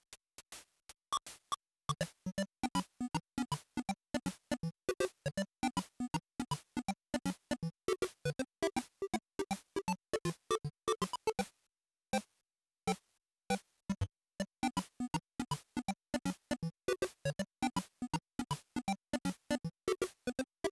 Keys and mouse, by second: 16.2-20.7 drag.